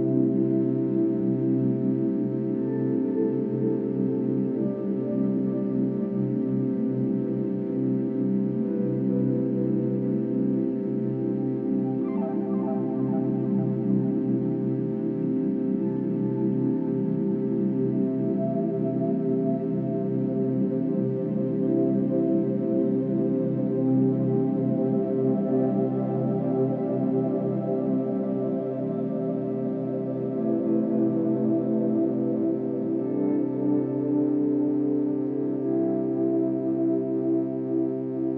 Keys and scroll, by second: 0.0-0.5 space, 20.7-21.3 space.